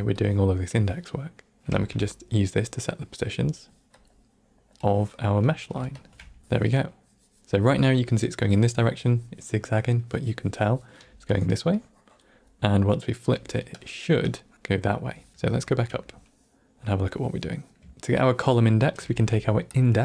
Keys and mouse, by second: 0.1 drag, 0.6-1.6 drag, 1.6 middle click, 1.6 shift+a, 4.7-5.6 drag, 5.9 alt+shift+click, 10.9-14.5 typing, 11.2-12.2 drag, 13.7 drag, 14.2 click, 15.3-15.7 ctrl+middle drag, 16.0-16.9 middle drag, 17.4 middle drag, 18.9 shift+a.